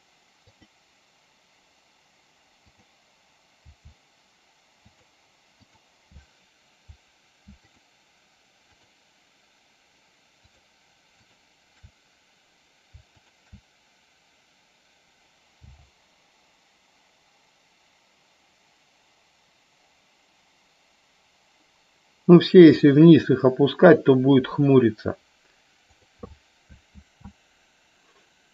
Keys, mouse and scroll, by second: 0.7 click, 2.8 click, 3.7 g, 5.0 click, 5.7 click, 7.8 shift+click, 10.5 shift+click, 11.5 shift+click, 13.3 shift+click, 27.2 ctrl+z.